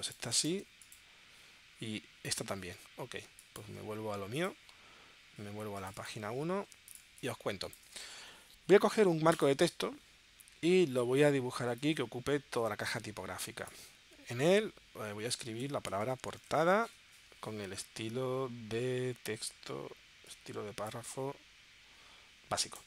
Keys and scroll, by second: 3.2 space, 7.0 space, 15.6-17.0 typing.